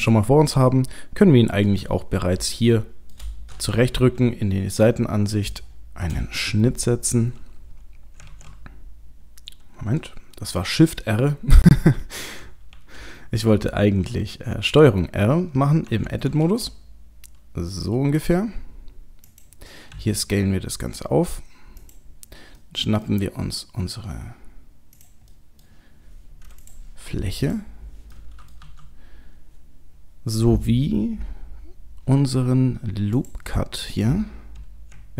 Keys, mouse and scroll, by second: 2.1 scroll up 1, 2.5 shift+middle click, 4.0 KP_3, 4.8-5.1 scroll up 1, 5.5 scroll up 7, 5.6 shift+middle click, 8.3 shift+r, 12.7 ctrl+z, 15.9 Tab, 16.4 ctrl+r, 19.9 s, 22.6 middle click, 23.2-23.8 scroll down 2, 23.8-25.0 scroll down 3, 25.0 click, 25.3 middle click, 26.6 click, 27.4 click, 28.2 middle click, 28.6 KP_3, 29.3-31.2 scroll up 1, 31.2-31.6 scroll up 2, 33.1 click.